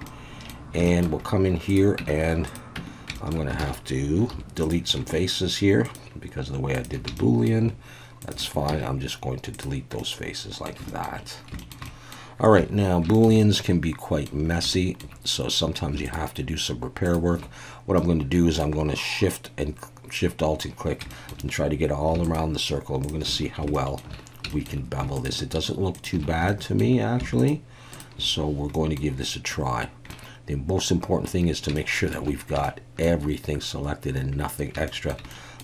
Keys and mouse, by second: 0.0-0.5 middle drag, 0.8 shift+middle drag, 2.0 Tab, 2.5 click, 2.8 Tab, 3.1 shift+middle click, 3.6 alt+a, 4.3 3, 4.6 click, 5.1 shift+middle click, 5.9 shift+click, 6.8 shift+click, 7.2 shift+middle click, 8.2 shift+click, 8.7 x, 10.0 middle click, 10.9 shift+middle click, 11.6 shift+middle click, 11.8 shift+middle click, 13.1 shift+middle click, 13.4 middle click, 14.7 shift+middle click, 15.9 shift+a, 16.1 shift+click, 18.0 middle click, 21.1 shift+middle click, 22.2 alt+shift+click, 23.7 shift+middle click, 24.5 shift+middle click, 25.0 shift+a, 26.5 shift+middle click, 27.2 shift+a, 27.4 click, 28.7 middle click, 30.1-31.3 middle drag, 31.8 shift+middle click, 32.6 shift+middle click, 34.9 shift+middle click, 35.3 middle click.